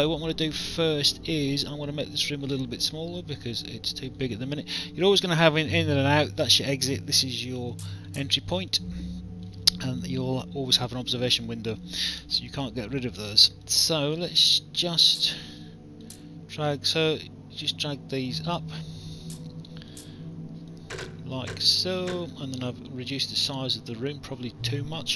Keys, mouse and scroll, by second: 0.2 click, 3.4 click, 7.7 alt+click, 11.2 alt+click, 12.5 click, 13.3 alt+click, 15.1 click, 18.4 click, 20.7 click, 22.5 alt+click, 24.3 alt+click.